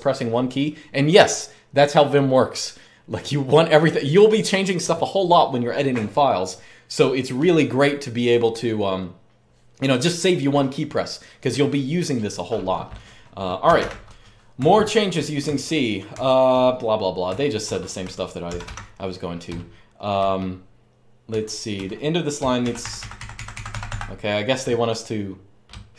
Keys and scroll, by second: 13.2-18.4 typing, 21.1-23.6 typing.